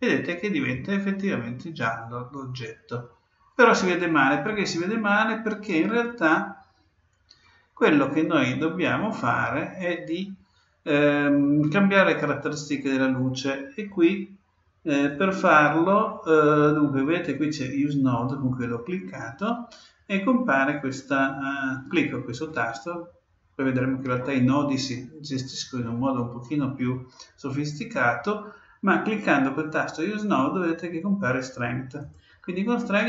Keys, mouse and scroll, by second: 14.9-16.7 drag, 31.9-33.0 drag.